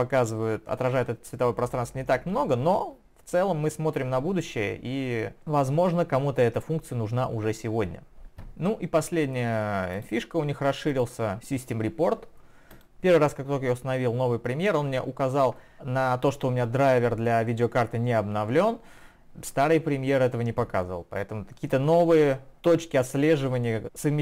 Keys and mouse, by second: 10.0 click, 11.0 click, 12.7 click.